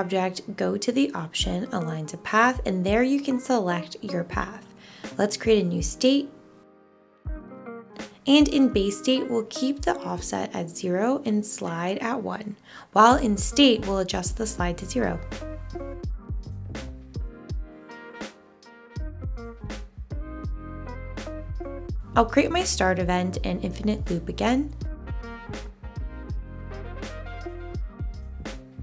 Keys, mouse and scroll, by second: 11.3-13.0 drag, 15.8 click.